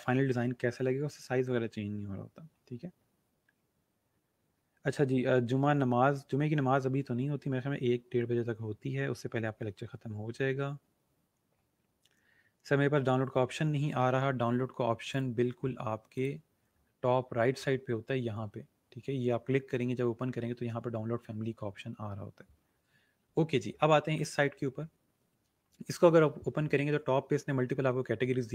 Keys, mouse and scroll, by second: 15.0 click, 16.1 click, 16.6 scroll up 1, 24.1 click, 26.1-27.2 scroll up 1.